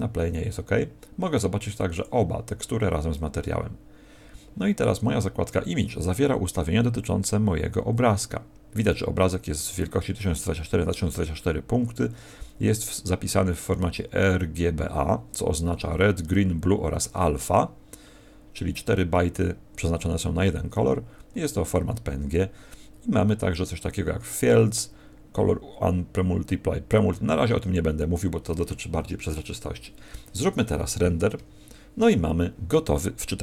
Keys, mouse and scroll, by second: 1.9 click.